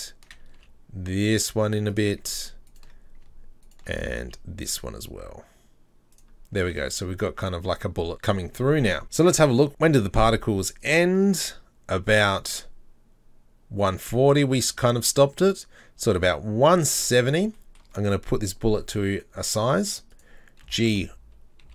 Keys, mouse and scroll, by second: 0.6 s, 2.7 alt+right click, 3.7 alt+right click, 4.2 s, 6.4 scroll down 3, 6.6 Tab, 7.6 scroll down 2, 10.8-14.3 drag, 17.6-18.9 shift+middle drag, 18.9 s, 20.7 g.